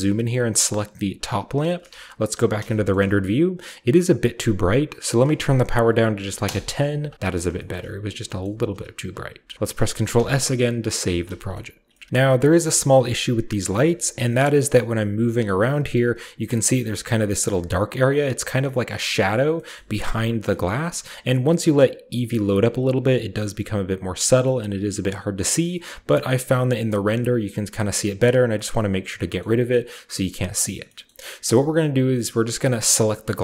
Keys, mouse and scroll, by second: 0.6-2.1 middle drag, 0.6-1.6 right drag, 1.3-3.1 scroll down 1, 1.9-2.5 typing, 2.9-5.1 middle drag, 3.1-5.1 scroll up 1, 5.1-6.2 drag, 6.2 typing, 6.4 Return, 7.2-9.5 scroll down 1, 7.6-10.3 shift+middle drag, 7.8 a, 8.8 a, 9.1 a, 10.2 ctrl+s, 11.1 ctrl+s, 11.4-12.5 shift+middle drag, 12.1 a, 12.6 shift+middle click, 12.8 shift+middle drag, 13.2-13.8 middle drag, 14.0 shift+middle click, 14.1-15.9 scroll up 1, 15.9-17.1 middle drag, 17.5-18.6 middle drag, 18.5-19.5 scroll down 1, 19.1-19.5 middle drag, 19.5-21.3 scroll up 1, 19.7-23.5 middle drag, 21.3-23.5 scroll up 1, 24.3-25.6 middle drag, 24.3-25.5 scroll down 1, 26.1-27.7 middle drag, 26.1-27.6 scroll up 2, 27.6-29.3 scroll down 2, 27.8-28.2 middle drag, 28.6-29.4 middle drag, 29.5-30.7 scroll up 1, 29.6-30.7 middle drag, 30.7-32.5 scroll down 1, 30.9-32.5 middle drag, 32.5-33.1 right drag, 33.1-33.4 middle drag.